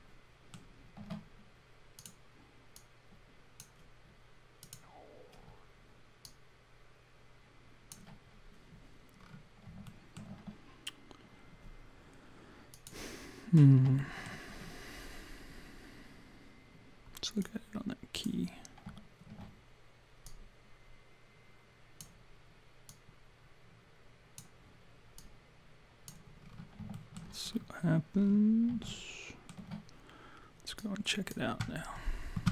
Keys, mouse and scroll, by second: 2.0 click, 2.8 click, 4.6 click, 6.2 click, 9.2 scroll down 3, 9.9 alt+middle click, 9.9 scroll down 2, 12.8 click, 13.5-13.8 scroll up 5, 14.0 alt+middle click, 14.6-14.9 scroll up 1, 17.4 click, 20.3 click, 22.9 click, 25.2 click, 26.4-27.1 scroll down 4, 27.0 alt+middle click, 27.5 scroll down 1, 28.2-28.6 scroll down 6, 28.9 alt+middle click, 30.8 click.